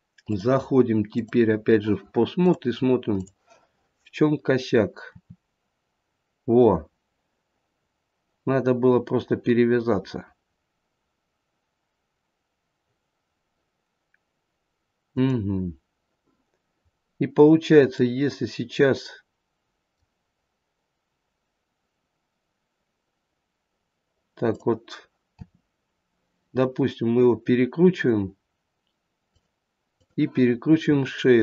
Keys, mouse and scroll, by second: 0.2 click, 1.0 click, 2.3 click, 5.1 r, 16.9-17.5 scroll up 1, 17.5-18.0 scroll down 1, 18.0 middle click, 24.5 click, 25.5 r, 29.8 click, 30.7 r.